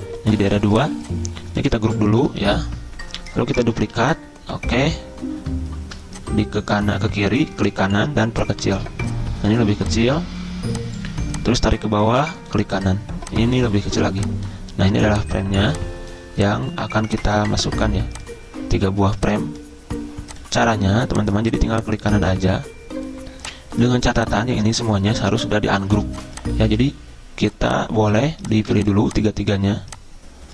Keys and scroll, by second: 0.5 ctrl+z, 2.0-3.0 typing, 4.0 ctrl+g, 25.3 ctrl+z.